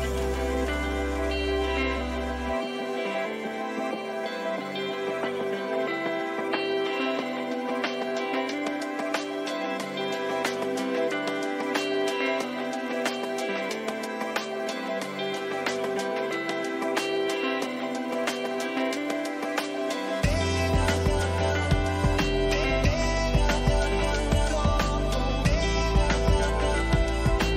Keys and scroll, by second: 15.0 Return, 21.8 ctrl+t.